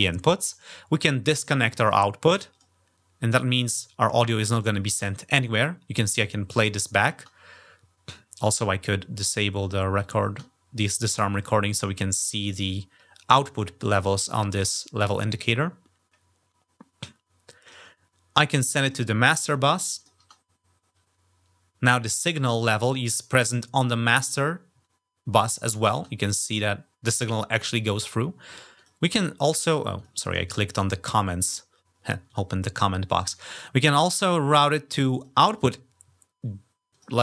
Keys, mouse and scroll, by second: 2.3 click, 4.3 click, 4.7 -, 9.1 click, 9.8 click, 17.4 click, 18.6 click, 19.8 click, 20.0 -, 25.7 -, 28.5 click, 29.8 click, 31.2 click, 32.1 click, 33.1 click, 34.9 click, 36.7 click.